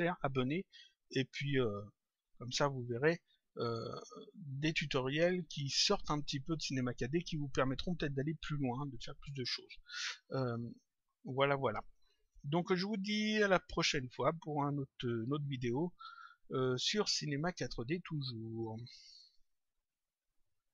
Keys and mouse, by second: 11.2 click.